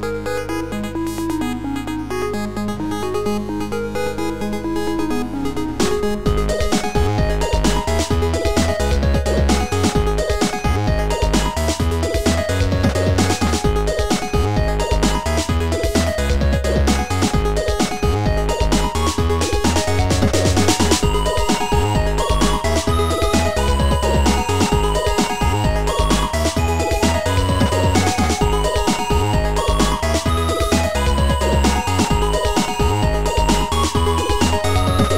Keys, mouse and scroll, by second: 0.0 click, 0.0 right click, 0.7 click, 5.7 click, 7.2 click, 8.6 click, 10.4 click, 13.1 click, 14.8 right click, 17.6 click, 17.6 right click, 19.4 click, 24.0 click, 32.4 click.